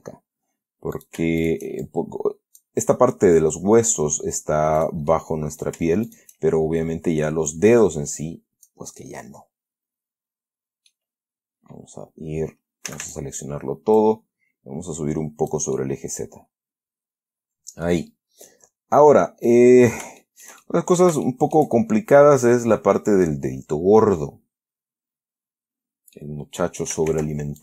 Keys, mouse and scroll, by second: 1.3 shift+right click, 1.7 shift+right click, 2.1 shift+click, 5.1 right click, 5.4 middle click, 6.4 shift+right click, 7.8-9.2 drag, 9.3-11.4 middle drag, 11.7-12.1 scroll up 1, 13.2 a, 14.3-16.0 drag, 16.1-18.4 middle drag, 18.4 scroll down 1, 18.8-20.0 middle drag, 20.0-20.5 scroll up 3, 20.5 shift+middle click, 21.6 shift+middle click, 22.2 shift+scroll down 2, 22.5-26.7 middle drag, 27.4 ctrl+r.